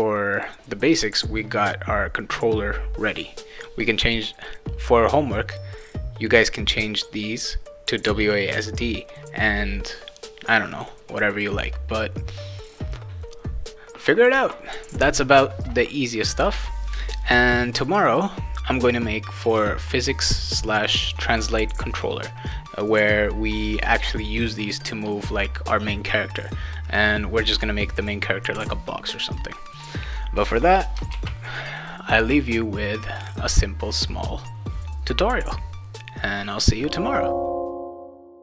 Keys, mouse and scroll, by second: 0.3 click, 5.6 click, 10.7 click, 11.5 click, 25.9 click, 28.7 click, 31.1 ctrl+s.